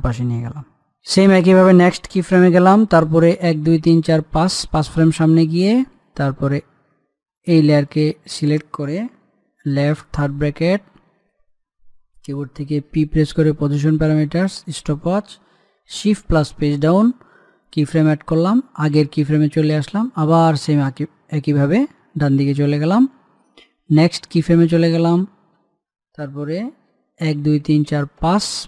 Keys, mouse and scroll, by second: 4.2 Page_Down, 8.1 click, 10.6 scroll up 1, 11.1 [, 12.1 [, 13.7 p, 15.4 click, 16.9 shift+Page_Down, 18.4-24.7 drag, 28.0 Page_Down.